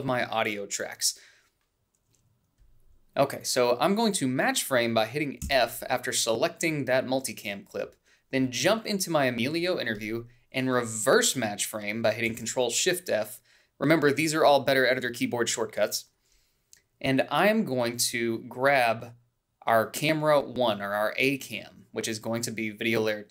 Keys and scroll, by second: 0.5 shift+a, 6.6 f, 13.5 ctrl+shift+f.